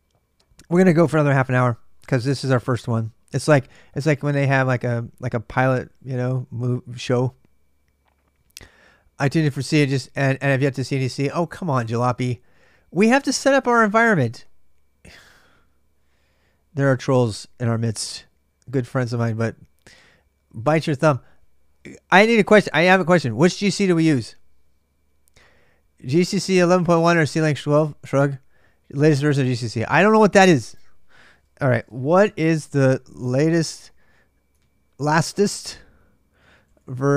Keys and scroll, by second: 31.4-34.0 typing, 35.9-37.1 typing.